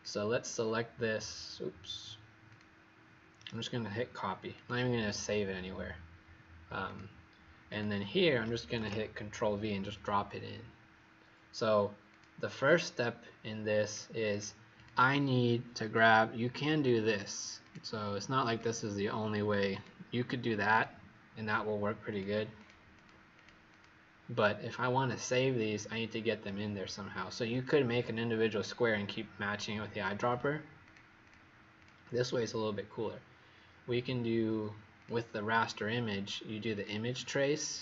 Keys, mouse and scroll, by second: 0.0 click, 2.6 click, 3.3 right click, 4.5 click, 8.7 ctrl+v, 12.0 click, 12.6 click, 14.3 click, 14.7 click, 15.9 click, 22.5 click, 22.9 click, 23.3 click, 23.6 click, 30.7 click, 31.2 click, 31.7 click, 34.9 click.